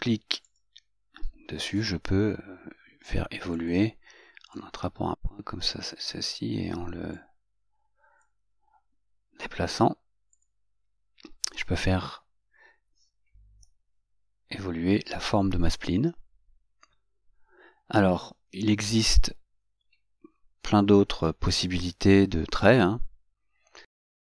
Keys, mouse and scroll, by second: 4.9-6.0 drag, 7.2 click, 10.4 click, 13.7 Escape, 21.2-24.2 middle drag.